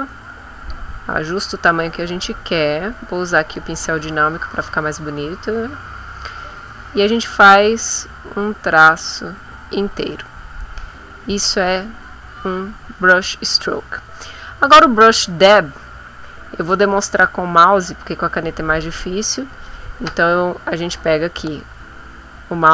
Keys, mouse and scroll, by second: 0.1 click, 3.4 click, 6.7-9.2 drag.